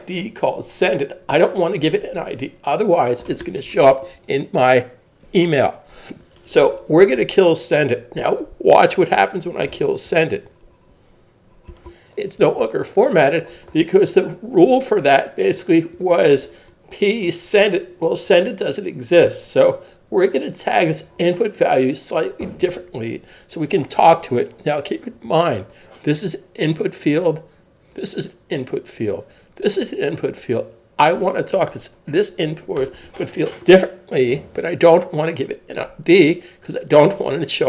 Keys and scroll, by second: 11.7 Return.